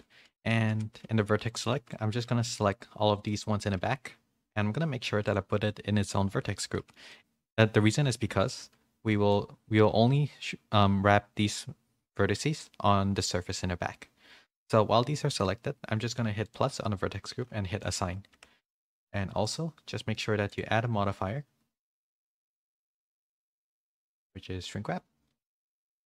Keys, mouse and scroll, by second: 0.2-1.0 typing, 2.2 middle click, 3.3 middle click, 3.8 z, 6.8 middle click, 7.1 shift+middle click, 9.1 middle click, 16.4 click, 17.9-19.6 drag, 19.4 Tab, 20.6-24.7 drag.